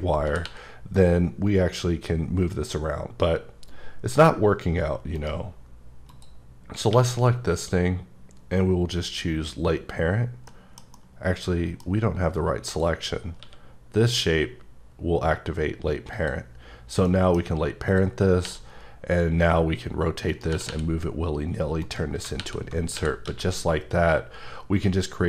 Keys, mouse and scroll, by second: 0.1 scroll down 2, 0.2 r, 0.4 r, 5.1 right click, 5.6 scroll up 2, 6.1 click, 6.9 q, 10.5 middle click, 10.8 scroll up 1, 10.9 middle click, 12.6 click, 13.4 q, 16.1 click, 16.7 scroll down 2, 17.1 middle click, 17.5 scroll up 1, 17.9 click, 18.4 r, 20.3 right click, 20.5 r, 20.7 r, 21.8 right click, 22.4 alt+r, 23.3 x.